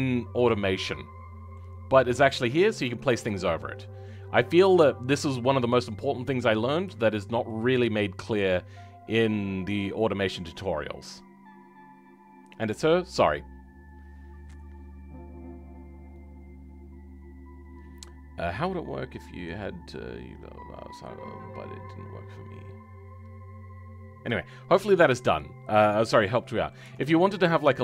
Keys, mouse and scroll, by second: 0.3-2.2 middle drag, 2.2-2.7 scroll up 2, 3.4-25.9 shift+middle drag, 25.9-26.3 scroll down 2, 26.3 middle click, 26.8 Tab, 27.1-27.7 scroll up 2.